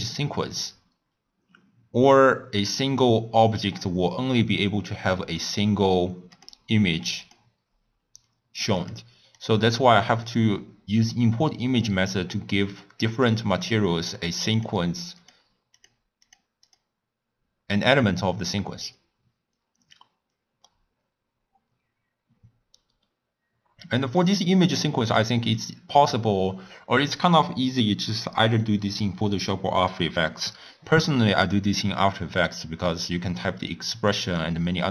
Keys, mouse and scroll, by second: 9.4 click, 10.3 click, 13.6-16.3 click, 16.7 click, 22.6 scroll down 1, 22.7-23.4 scroll up 1, 24.2 click, 24.6 click, 25.5 click, 26.1 click, 33.0 scroll up 1, 33.1-34.2 scroll down 2, 34.2 click.